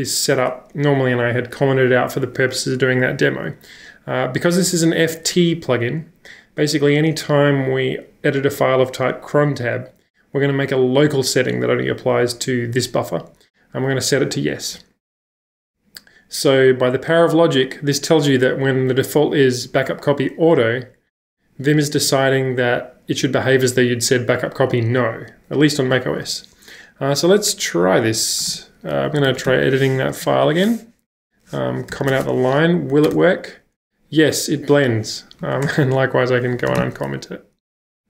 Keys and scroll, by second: 28.4-30.0 typing, 30.1 Up, 30.5 Return, 31.2-38.0 typing, 35.4 Page_Up.